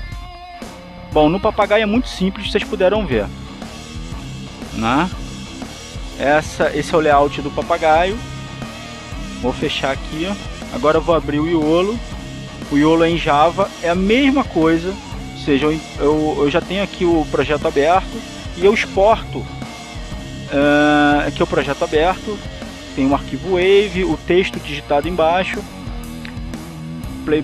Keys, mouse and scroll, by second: 1.9 click, 5.2-7.5 drag, 10.7 click, 11.8 click, 14.0 click, 16.7 click, 17.7 click, 18.6 click, 19.3 click, 20.8 click.